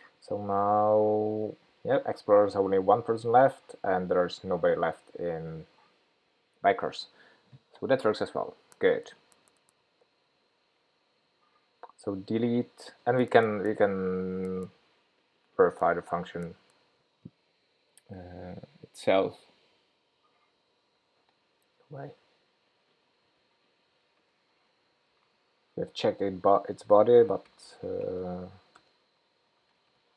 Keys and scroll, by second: 13.7 super+z, 16.4 super+c, 25.3 super+v.